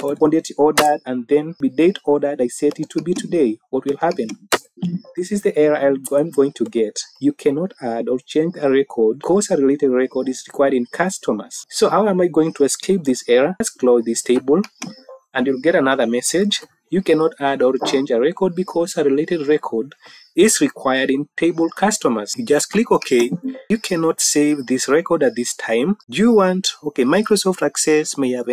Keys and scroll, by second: 0.7 Tab, 4.4 Tab.